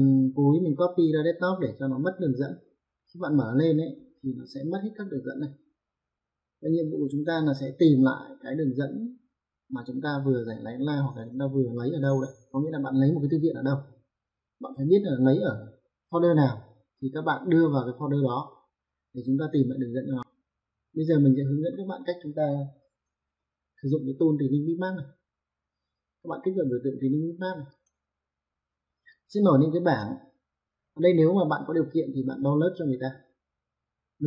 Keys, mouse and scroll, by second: 27.8 click, 29.1 click.